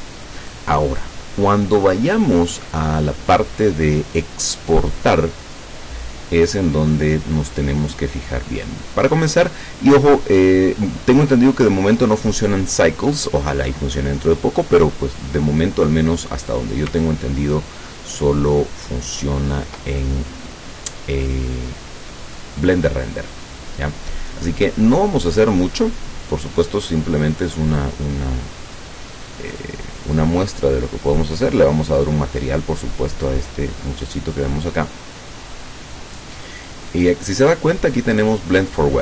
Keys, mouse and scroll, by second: 17.1-19.9 ctrl+drag, 20.0-23.0 ctrl+middle drag, 23.2-23.5 scroll up 2, 24.4 scroll up 2, 29.6 click, 30.2 middle click, 31.2 click, 36.2 click.